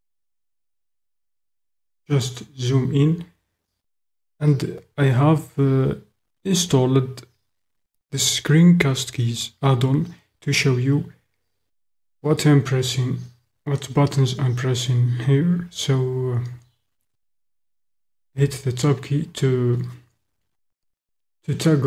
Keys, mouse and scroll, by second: 1.0-2.4 middle drag, 18.7 Tab.